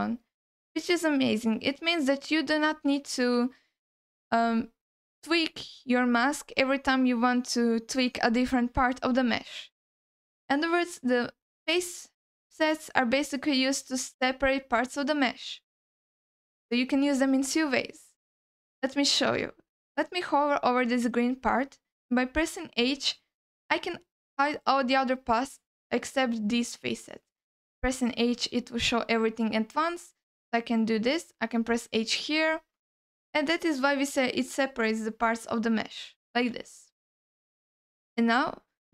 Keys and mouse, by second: 1.4 ctrl+y, 2.9 ctrl+z, 3.9 ctrl+z, 4.6 alt+middle click, 8.2 alt+middle click, 9.8 middle click, 23.0 h, 28.2 h, 30.9 h, 32.3 h, 33.0 alt+middle click, 35.3 h, 36.5 h, 37.3 alt+middle click, 38.3-38.9 drag.